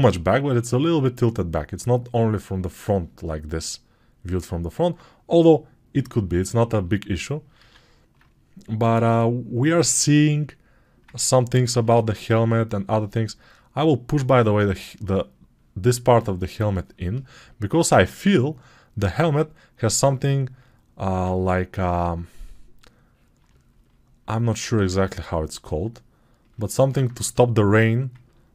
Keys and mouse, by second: 7.5 alt+q, 24.5 alt+q.